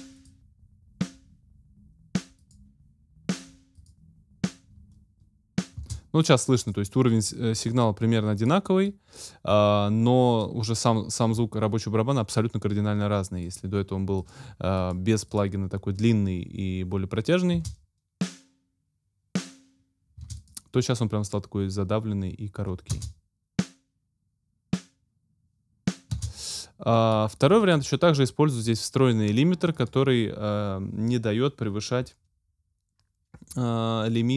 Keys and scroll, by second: 5.8 space, 17.5 space, 20.2 space, 22.9 space, 26.1 space.